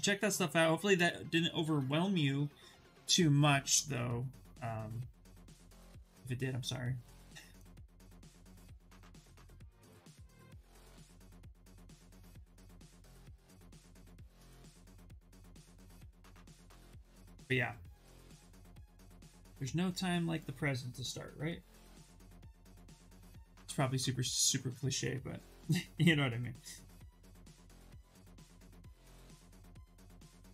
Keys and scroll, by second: 0.8 shift+f, 11.9-14.1 typing, 22.7 s.